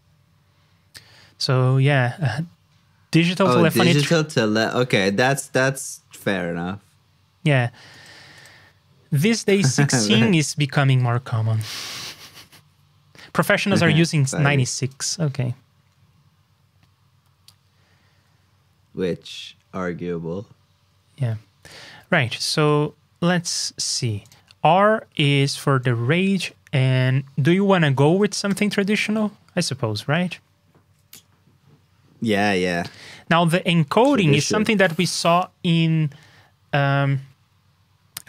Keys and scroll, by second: 22.6 super+Tab, 33.0 super+Tab.